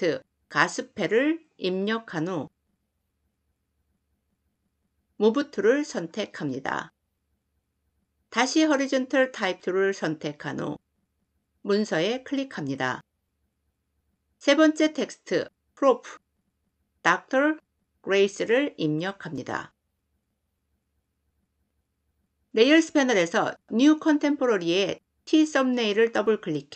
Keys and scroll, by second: 5.0 v, 8.4 t.